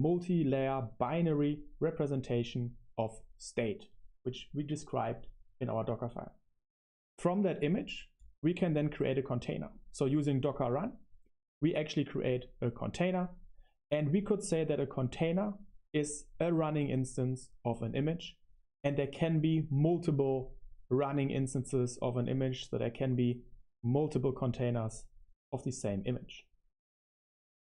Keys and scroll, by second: 9.2 Escape, 9.8 Escape, 10.0 super+3, 12.9 super+1, 13.2 super+1.